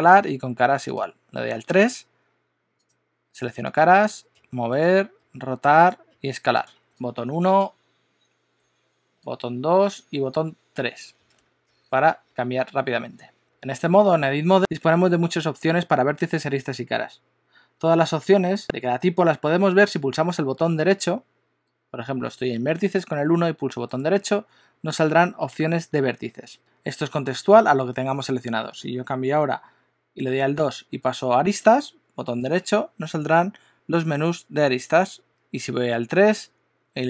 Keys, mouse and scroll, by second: 0.3 3, 1.1 click, 2.8 click, 3.9 click, 4.3 g, 5.2 r, 6.1 s, 11.7 1, 11.9 2, 12.5 1, 13.5 1, 13.8 click, 23.8 right click, 30.6 2, 32.3 right click, 36.3 3.